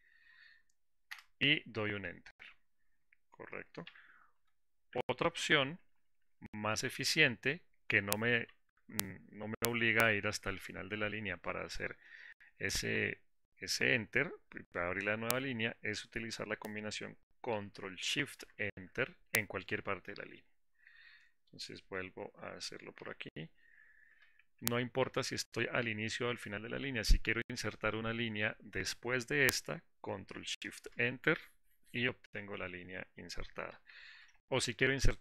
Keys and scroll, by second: 4.1 ctrl+shift+-, 18.6 ctrl+shift+Return, 23.5 ctrl+shift+-, 30.8 ctrl+shift+Return, 34.1 ctrl+shift+-.